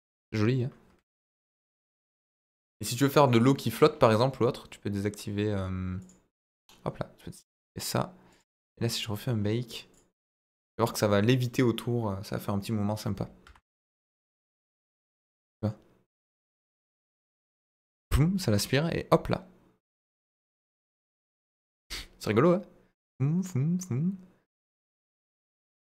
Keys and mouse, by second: 6.1-6.6 drag, 8.3 click, 9.9 click, 10.4-13.5 drag, 14.5-24.5 drag, 24.8-25.9 middle drag.